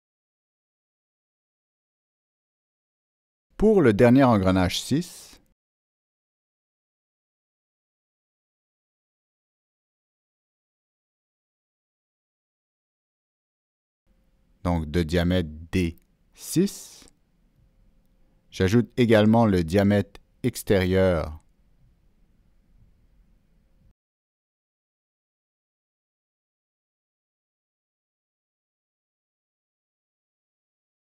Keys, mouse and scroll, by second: 0.1 Down, 0.1 Return, 0.1 Escape, 0.1 click, 0.1-0.5 scroll up 1, 0.9 ctrl+middle click, 1.8 ctrl+scroll down 1, 3.2 right click, 7.0 right click, 7.0 click, 7.1 right click, 9.0 click, 10.1 right click, 11.8 click, 11.9 right click, 12.6 click, 14.0 right click, 14.0 click, 14.5 right click, 14.6 click, 16.3 Down, 16.9 Return, 18.3 Down, 18.3 Return, 19.6 Escape, 19.6 Return, 19.6 Down, 21.0 click, 21.8 Escape, 21.8 Return, 21.8 click, 23.5 Escape, 23.5 right click, 23.5 click, 23.8 click, 25.2 click, 25.3 Escape, 25.3 right click, 26.0 click, 26.5 Escape, 27.2 right click, 28.6 click, 29.5 click, 29.6 Escape, 29.6 right click.